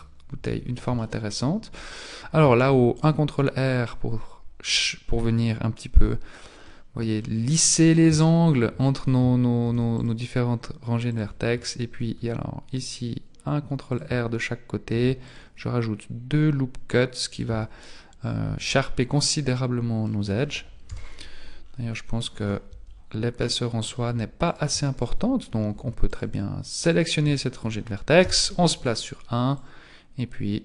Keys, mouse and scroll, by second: 0.5 Tab, 1.0 shift+middle click, 1.7-2.4 scroll up 2, 2.6 ctrl+r, 6.6 middle click, 7.6-8.2 scroll up 2, 8.2 shift+middle click, 9.6 ctrl+r, 11.9 ctrl+r, 14.9 ctrl+r, 17.5 Tab, 17.8 middle click, 20.3-20.8 scroll down 5, 20.8 KP_1, 21.6-22.2 scroll down 3, 22.2-23.4 scroll up 11, 22.6 Tab, 23.4 middle click, 24.4 alt+right click, 24.9 alt+shift+right click, 26.2 alt+right click, 27.0 alt+right click, 28.2 KP_1, 29.5 click.